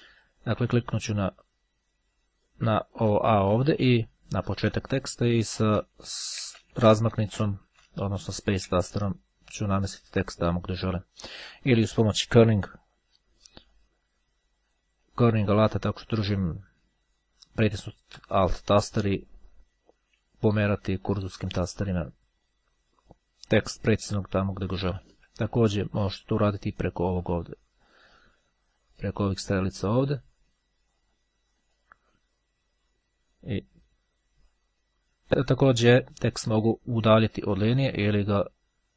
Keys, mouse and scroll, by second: 5.1 space, 8.1 space, 12.5 alt+Left, 15.0 alt+Right, 18.4 Right, 20.3 Left, 21.4 Right, 21.5 Right, 23.8 Left, 24.0 Left, 26.9-30.2 drag, 35.2 click, 35.9-38.9 drag.